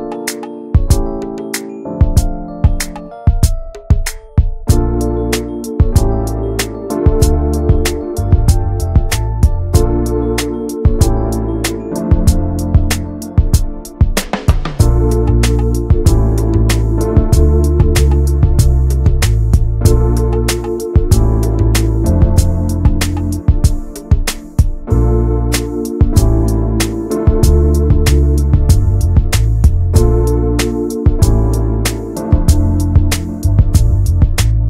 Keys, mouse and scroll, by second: 0.0 ctrl+space, 0.4 scroll down 1, 0.6 middle click, 0.9 ctrl+s, 1.2 click, 1.5 middle click, 1.7 ctrl+s, 1.8 click, 2.0 middle click, 2.5 ctrl+s, 3.2 ctrl+s, 3.3-4.7 drag, 4.7 middle click, 5.2 ctrl+s, 5.4 click, 6.1 click, 6.4 middle click, 7.1 scroll up 2, 7.2 ctrl+s, 7.4 click, 7.6 middle click, 8.1 click, 8.4 middle click, 8.9 click, 9.0 middle click, 9.4 scroll up 1, 9.5 ctrl+s, 9.7 middle click, 10.1 ctrl+s, 10.3 middle click, 10.6 ctrl+s, 10.8 middle click, 11.2 click, 11.4 shift+middle click, 11.9 ctrl+s, 12.4 click, 13.6 ctrl+s, 13.9-15.2 shift+middle drag, 15.2 click, 15.3 middle click, 15.6 ctrl+s, 27.3 click, 27.5-28.7 middle drag, 28.7 ctrl+s.